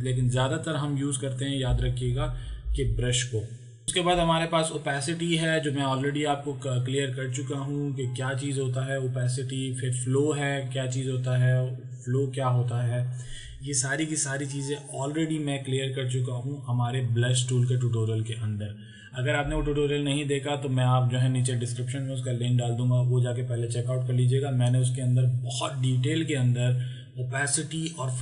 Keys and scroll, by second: 1.7 ctrl+z.